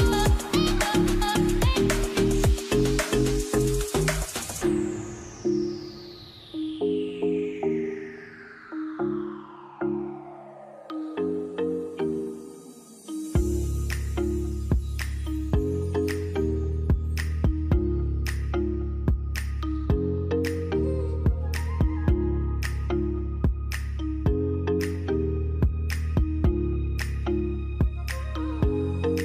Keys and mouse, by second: 1.4 shift+middle click, 4.9 k, 7.7 alt+a, 8.1 shift+middle click, 11.4 click, 12.6-14.7 drag, 15.5 alt+a, 16.3 shift+middle click, 19.6 ctrl+s, 20.8-22.8 shift+middle drag, 24.5-27.9 shift+middle drag, 27.9 ctrl+s.